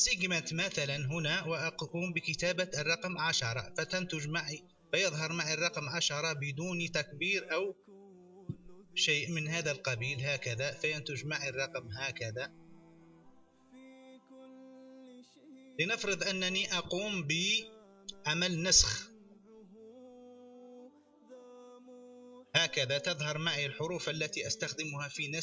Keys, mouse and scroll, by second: 0.4 click, 2.4-3.6 typing, 6.2 click, 7.1-8.1 typing, 7.2 click, 10.3 click, 11.3 click, 14.4 click, 15.0 click, 15.5 click, 20.5 click, 21.1 ctrl+c, 24.1 ctrl+v.